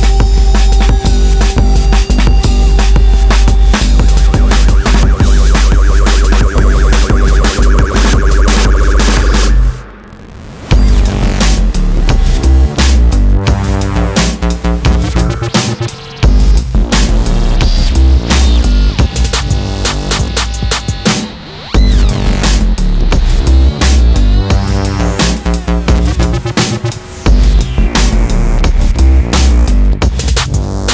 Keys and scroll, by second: 4.1 ctrl+e, 5.3 ctrl+e, 6.6 ctrl+e, 21.8 alt+s, 26.8 ctrl+e, 27.9 ctrl+e.